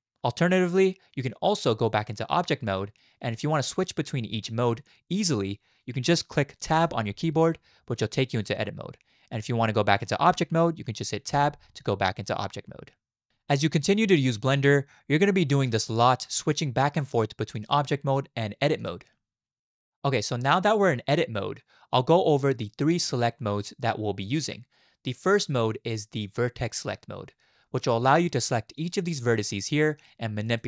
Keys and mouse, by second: 1.8 click, 6.7 Tab, 11.3 Tab, 17.7-18.9 drag, 28.7 click, 29.5 middle click, 30.4 click.